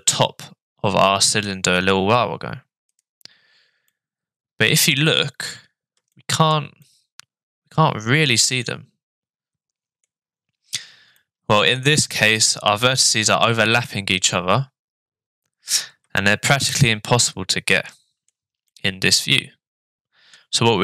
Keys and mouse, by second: 3.9-4.9 middle drag, 6.1 shift+middle click, 6.8-10.0 middle drag, 11.2 middle click, 16.2 shift+middle click, 16.7-18.3 middle drag, 18.7-20.3 middle drag.